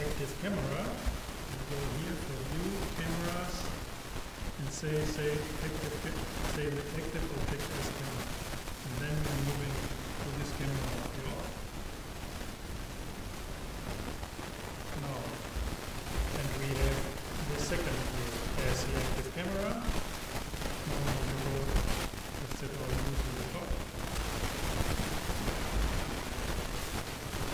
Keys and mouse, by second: 2.2-4.0 drag, 21.8 KP_7.